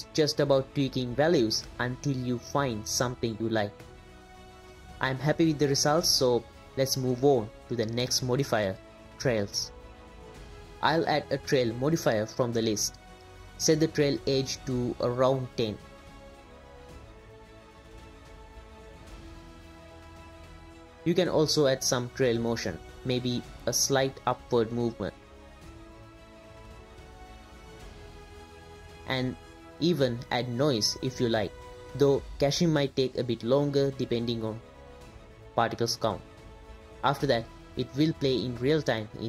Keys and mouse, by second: 0.1 click, 0.9-2.2 drag, 1.6 BackSpace, 2.9 click, 9.7 space, 9.9 click, 10.6-12.7 drag, 14.2-15.9 drag, 16.3 space, 19.6-20.9 middle drag, 20.9 space, 21.6 click, 22.7 click, 22.9 space, 24.1 click, 25.5 click, 26.0 space, 29.3 space, 29.9 click, 30.5 click, 32.1 space, 32.6 click, 33.6 click, 34.6 click, 34.7 space.